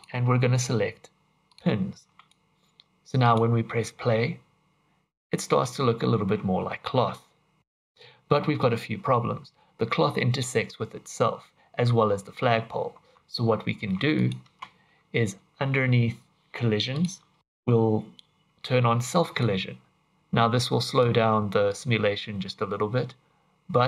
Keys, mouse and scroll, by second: 2.3 click, 3.2 click, 12.9 Tab, 13.8 Tab, 14.1 click, 14.4 space, 15.3-15.8 scroll down 7, 16.9 click, 17.3 scroll down 2, 19.2 click, 20.8 click, 21.7 click.